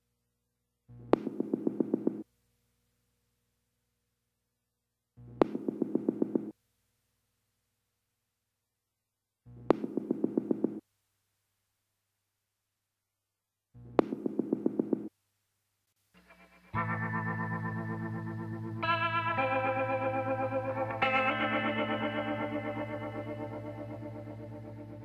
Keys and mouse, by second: 2.3 click, 2.9-5.0 middle drag, 6.4 click, 6.9-8.2 middle drag, 8.4-11.0 middle drag, 11.0 click, 12.0-14.4 drag, 13.6 ctrl+KP_Add, 13.8 ctrl+KP_Add, 14.2 ctrl+KP_Add, 14.6 ctrl+KP_Add, 15.0 ctrl+KP_Add, 16.2-17.9 drag, 17.4 KP_Decimal, 19.5 KP_1, 21.8 shift+d.